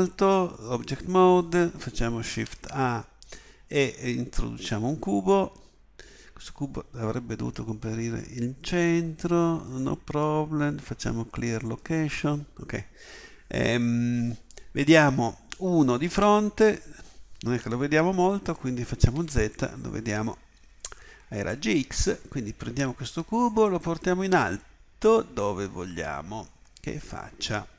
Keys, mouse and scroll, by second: 2.2 shift+a, 16.0 KP_1, 19.1 z, 22.7-27.7 drag.